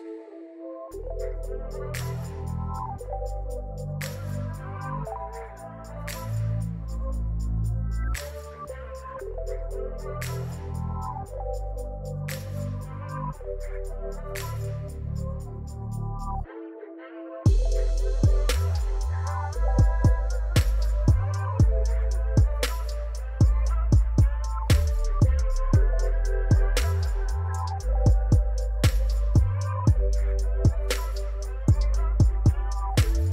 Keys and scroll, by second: 0.2 shift+d, 0.9 z, 1.4 r, 1.5 z, 2.2 Tab, 2.6 s, 5.2 Tab, 5.8 r, 6.9 Escape, 7.7 r, 7.8 x, 8.9 r, 10.1 r, 11.0 r, 12.5 r, 14.6 r, 16.3 r, 16.9 Escape, 17.2 r, 17.3 x, 19.4-22.2 typing, 19.8 Escape, 21.8 Escape, 23.6 1, 24.3 r, 25.1 r, 25.7 r, 27.9-30.7 typing.